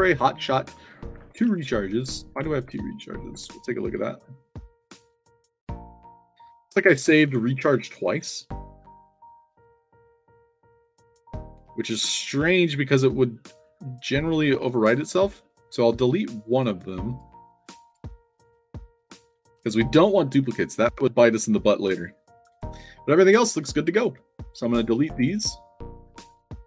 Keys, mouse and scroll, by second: 0.0-2.6 typing, 3.3 Tab, 14.1 right click, 15.4 click, 17.0 click, 17.8 click, 18.4 click, 19.4 middle click, 19.9 scroll up 2, 20.7 click, 23.5-23.9 alt+drag, 24.1 d, 24.1 space, 24.5 click, 26.4 click.